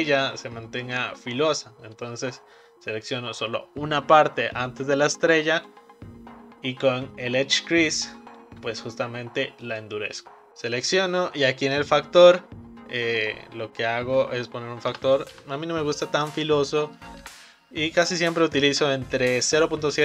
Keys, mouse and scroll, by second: 5.5-8.6 right drag, 11.8-14.9 drag.